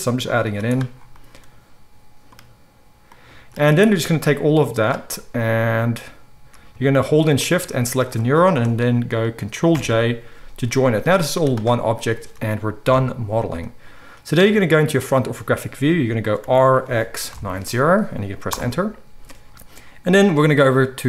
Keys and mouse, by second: 0.4 z, 3.5 z, 4.1-7.4 drag, 4.1-7.4 middle drag, 9.8 ctrl+j, 10.1-11.2 drag, 10.6 g, 11.2-21.0 middle drag, 11.3 z, 13.6 KP_1, 16.4 r.